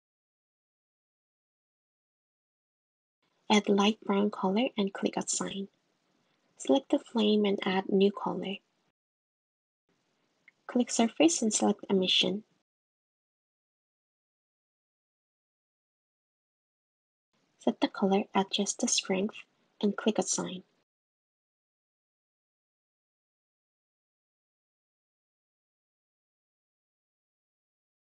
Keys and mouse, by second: 5.0 click, 6.2 click, 8.4 click, 9.7 click, 10.9-12.6 drag, 13.3 click, 19.2 click, 20.7 click, 21.3 Tab, 21.9 click, 25.5 click, 26.4 click, 26.7 click, 27.3 click.